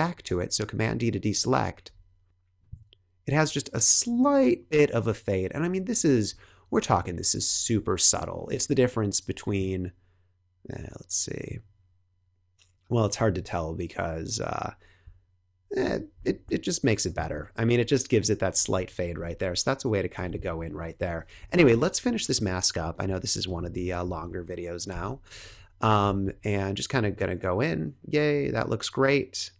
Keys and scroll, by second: 0.2 super+d, 19.1 super+-, 20.7 super+=, 21.4 space, 24.0 b, 25.2 [.